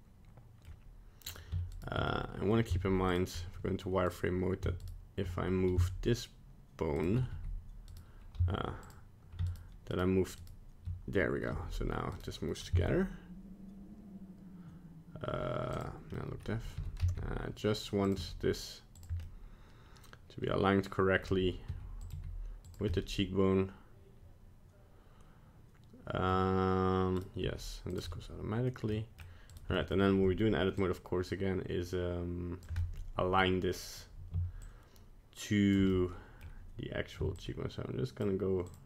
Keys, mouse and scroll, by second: 1.2 right click, 1.7 shift+right click, 2.0 middle click, 2.6 z, 3.3 scroll up 1, 3.5 middle click, 4.0 right click, 4.8 shift+right click, 5.7 z, 7.3 g, 8.3 z, 9.4 shift+right click, 9.9 shift+right click, 10.3 shift+right click, 11.5 g, 12.7 z, 16.1 middle click, 16.7 r, 18.3 g, 19.2 middle click, 21.2 middle click, 21.6 r, 22.1 g, 22.9 middle click, 27.1 right click, 27.4 g, 28.0 middle click, 28.9 middle click, 29.4 right click, 29.7 middle click, 30.7 click, 32.7 middle click, 34.6 shift+click, 35.9 middle click, 37.3 shift+click, 38.6 shift+click.